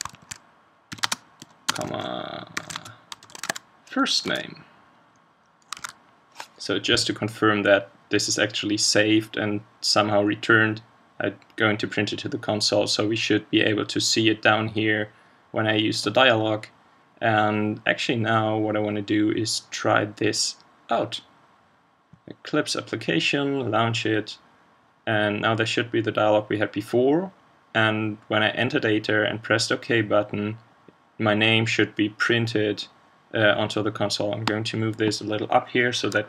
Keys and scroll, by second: 5.8 super+s.